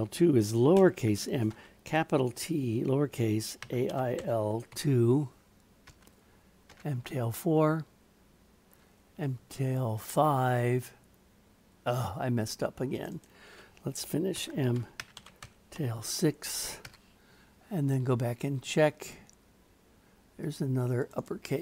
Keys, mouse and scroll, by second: 8.7-13.1 drag, 13.1-17.4 drag, 20.4 click, 21.2-21.6 drag.